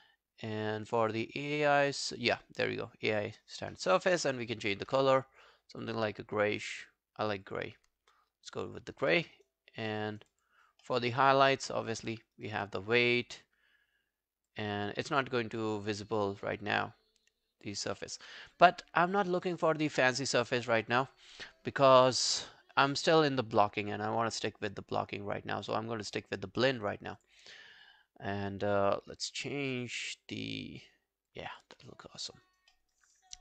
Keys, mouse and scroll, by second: 1.5 double click, 9.1 alt+middle click, 9.4 alt+right click, 9.9 alt+middle click, 10.1 alt+right click, 10.3 alt+click, 10.9 alt+middle click, 11.1 alt+right click, 12.2 alt+middle click, 12.4 alt+right click, 18.0 alt+middle click, 18.4 alt+scroll down 1, 18.6 alt+click, 19.1 alt+scroll down 1, 19.4 alt+right click, 19.7 alt+click, 20.2 alt+middle click, 21.4-21.8 scroll up 10, 23.5 scroll up 1, 23.6 scroll down 5, 26.4 scroll down 1, 26.4-27.7 scroll up 1, 31.8 alt+scroll down 3, 32.1 alt+click, 32.5 alt+right click, 32.7 alt+middle click, 33.0 alt+right click, 33.2 alt+click.